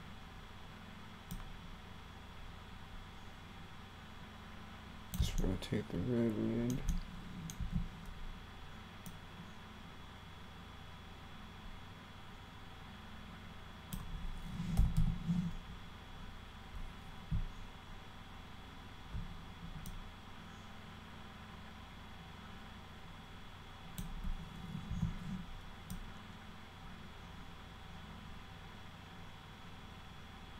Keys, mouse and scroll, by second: 1.4-5.2 drag, 5.4-6.7 alt+middle drag, 6.9 middle click, 7.6 w, 9.1-13.9 drag, 14.6-15.5 typing, 16.7 click, 20.0-24.0 drag, 24.9 e, 25.9-30.5 drag.